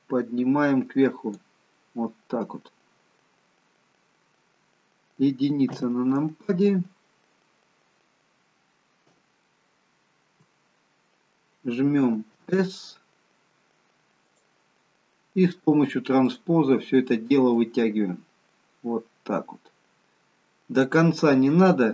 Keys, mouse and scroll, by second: 0.2 click, 2.0 middle click, 4.1-4.9 scroll up 3, 4.9-5.7 scroll up 1, 5.7 KP_1, 6.8-8.1 scroll up 2, 8.4-9.4 scroll up 6, 9.4 shift+middle click, 12.3 s, 16.3 click, 17.6 click.